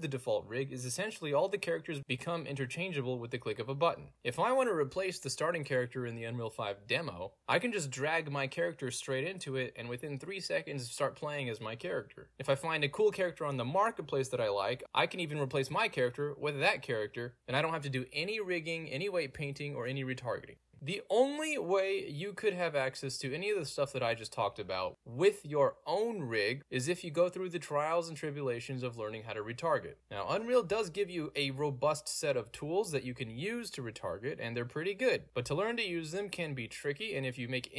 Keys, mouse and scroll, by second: 7.3 scroll down 1, 7.6 click, 8.4 middle click, 8.4-9.3 scroll down 2, 9.5 click, 10.9 a, 12.0 d, 12.4 click, 14.8-15.8 scroll up 2, 15.3 middle click, 16.6 click, 17.2 right click, 17.3 d, 19.5 d, 19.6 s, 20.1 s, 22.3 s, 23.0 a, 23.2 a, 23.5 d, 26.9 d, 29.8 d, 30.0 Return, 30.4-31.5 middle drag, 30.4-31.3 scroll down 2, 31.3-32.3 scroll down 2, 31.8-35.4 middle drag, 32.3-32.9 scroll down 1, 32.9-34.6 scroll down 1, 34.6-35.4 scroll down 1, 35.8 middle click, 35.8 scroll down 2.